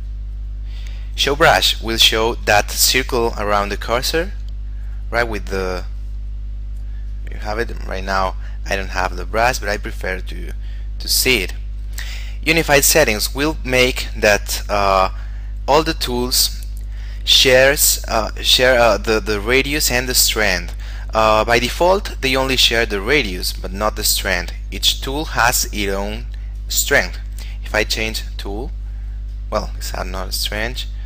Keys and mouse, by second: 0.3 click, 6.0 click, 14.9 click, 26.8 click.